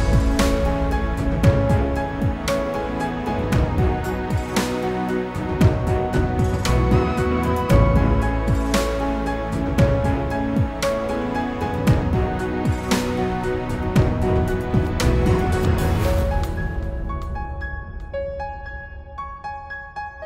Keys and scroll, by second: 4.0 ctrl+g.